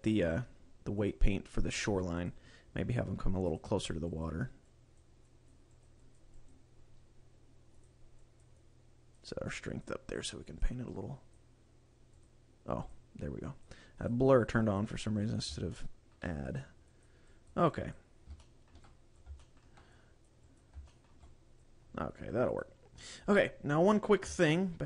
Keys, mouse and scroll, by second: 1.1 click, 3.5 click, 4.2 click, 4.7 click, 5.3 click, 5.7 click, 6.0 click, 6.4 click, 7.7 click, 8.5 click, 9.3 click, 10.2 click, 10.9 click, 12.8 click, 13.4 click, 14.0 click, 14.4 click, 14.6 click, 15.2 click, 15.7 shift+middle click, 16.5 click, 17.0 click, 17.3 click, 17.7 click, 18.4 shift+middle click, 18.8 click, 19.3 shift+middle click, 20.0 click, 20.5 click, 20.8 shift+middle click, 21.2 click, 22.4 click, 24.4 click.